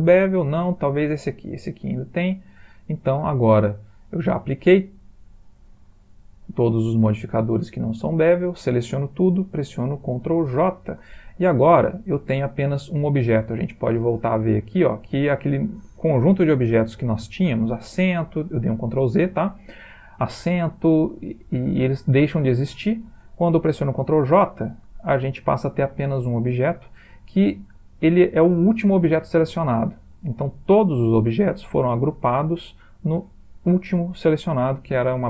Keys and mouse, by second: 0.6 click, 1.9 click, 2.5 click, 5.6 click, 7.8-8.3 ctrl+middle click, 7.8 ctrl+middle click, 7.9 ctrl+middle click, 10.5 ctrl+j, 14.0 click, 14.6 click, 16.5 ctrl+z, 24.3 ctrl+j.